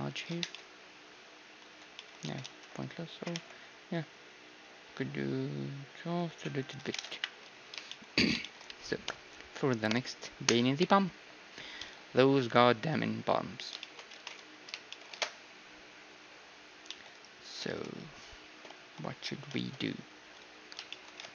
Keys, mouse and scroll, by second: 0.4 Tab, 1.7 Tab, 2.2 ctrl+z, 2.6 ctrl+z, 3.2 g, 6.9 Tab, 7.2 KP_1, 7.4 z, 7.6-10.3 middle drag, 13.8-17.2 middle drag, 14.2 ctrl+s, 15.1 shift+space, 16.9 z, 17.2-18.9 right drag, 17.7 ctrl+s, 20.3-21.3 middle drag.